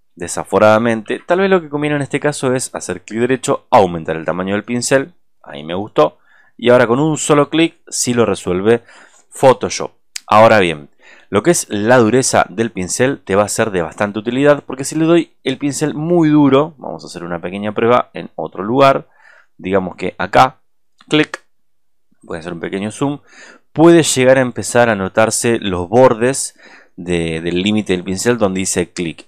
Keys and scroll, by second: 0.9 ctrl+z, 21.7 ctrl+z.